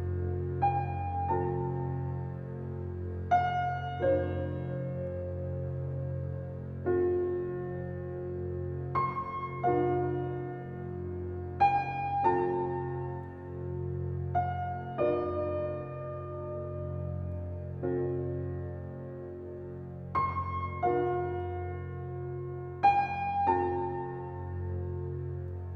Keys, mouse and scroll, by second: 1.9-2.6 scroll down 1, 3.4 scroll up 1, 23.0 scroll down 1, 23.6 scroll up 1, 24.9 scroll down 1, 25.2 scroll up 1.